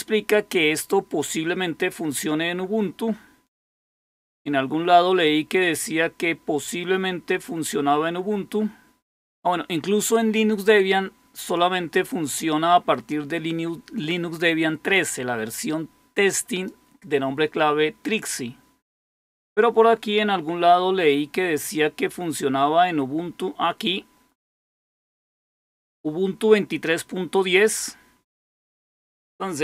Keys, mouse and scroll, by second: 0.0-0.9 scroll down 1, 3.6-4.2 scroll down 2, 5.4-6.0 scroll down 2, 6.6-7.4 scroll down 2, 7.9-8.8 scroll down 2, 13.0-16.6 drag, 24.3-25.8 drag.